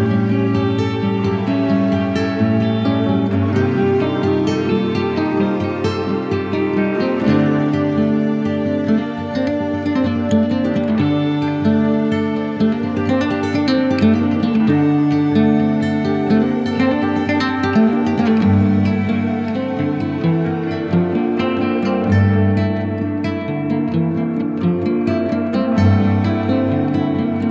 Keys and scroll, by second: 2.0 super+a, 3.3 shift+super+d.